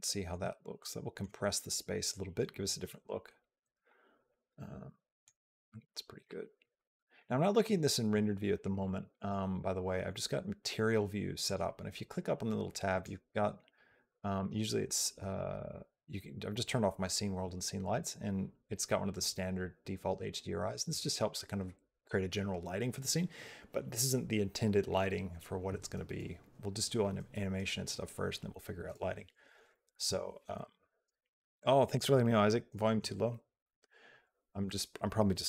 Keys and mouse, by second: 0.7 middle click, 3.7-5.1 shift+middle drag, 6.1 shift+middle click, 7.1 shift+middle click, 9.0 click.